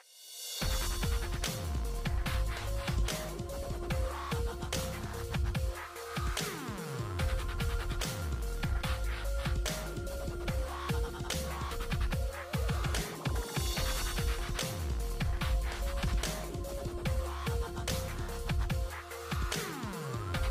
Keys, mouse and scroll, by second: 1.6-8.6 drag, 8.6 g, 9.4-11.2 drag, 11.2-13.4 middle drag, 13.4-20.5 drag, 16.4 typing.